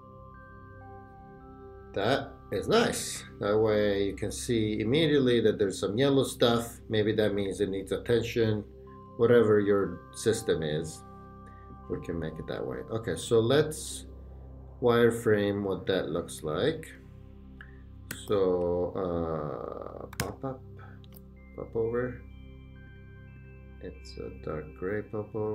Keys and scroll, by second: 18.1 /, 20.1 p, 21.0 Return.